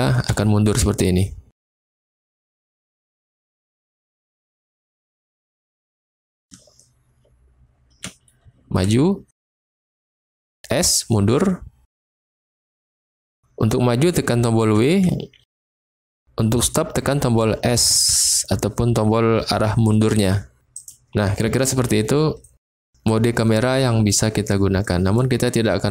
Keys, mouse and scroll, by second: 0.3 s, 1.4 s, 6.3-20.7 drag, 6.5-8.0 w, 8.4 s, 9.5 s, 10.2 s, 12.9 w, 17.7 s, 20.7 middle click, 20.8 click, 22.5 middle click, 23.4-24.0 middle drag, 24.7-25.2 middle drag.